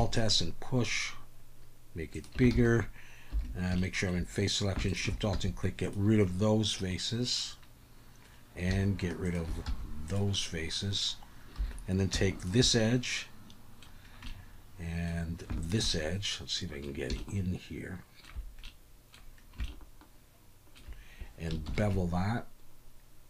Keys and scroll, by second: 2.5 alt+a, 3.3 3, 5.3 x, 9.6 x, 11.6 2, 21.7 ctrl+b.